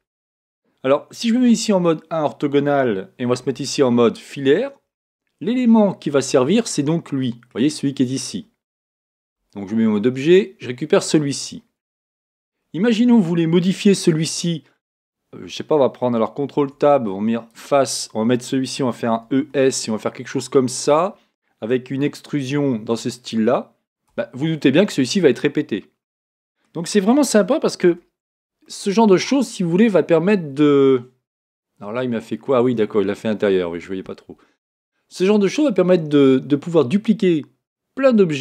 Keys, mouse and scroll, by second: 0.1-0.6 scroll up 1, 0.6 middle click, 1.5 KP_1, 3.3 z, 6.3-9.1 middle drag, 9.1 middle click, 9.3 Tab, 10.3-12.1 right drag, 12.2 Tab, 12.6-15.8 middle drag, 16.5 ctrl+Tab, 18.0-19.6 right drag, 19.1 e, 20.9 click, 21.9 e, 23.3 click, 24.1 Tab, 24.4 middle click, 25.0-26.8 middle drag, 27.9 z, 28.7-30.6 middle drag.